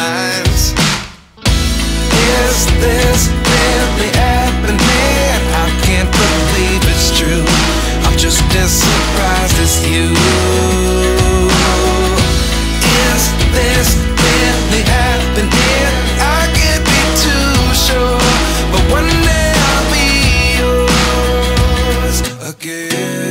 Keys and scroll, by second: 21.5 ctrl+Return.